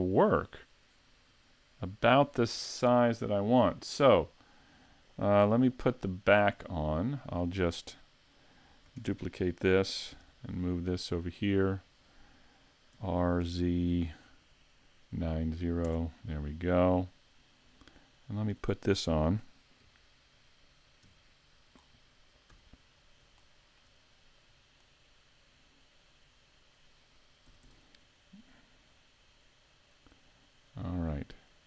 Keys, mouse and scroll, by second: 5.4-6.4 scroll down 3, 6.4 right click, 6.8 middle click, 9.0 shift+d, 11.3 click, 13.0 r, 17.8 click, 19.8 KP_1, 21.1 KP_5, 21.8-22.5 scroll up 4, 22.5 z, 23.0 scroll up 1, 23.4 shift+middle click, 24.4 click, 27.5 s, 30.8 click.